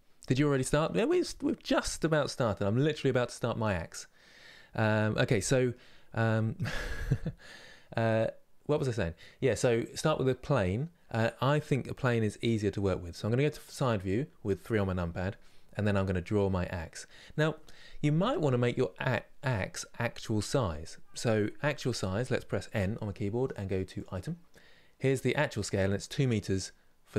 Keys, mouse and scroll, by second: 13.3 KP_3, 23.6 click.